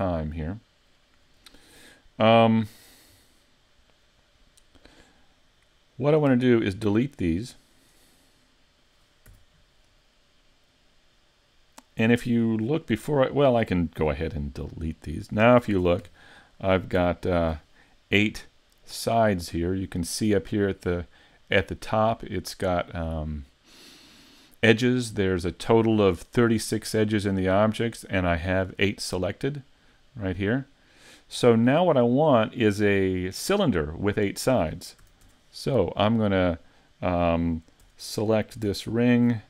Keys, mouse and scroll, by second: 1.7 shift+middle click, 2.7-3.1 scroll down 1, 3.3 scroll down 3, 6.0 right click, 6.7 shift+right click, 7.1 right click, 7.7 shift+right click, 8.3 middle click, 9.3 x, 14.0 x, 15.7 ctrl+Tab, 17.1 alt+right click, 35.0 a, 35.2 Tab, 35.6-37.0 scroll down 1, 37.0-37.8 scroll down 2, 37.8 Tab, 37.8-38.2 scroll up 2, 38.9 alt+right click.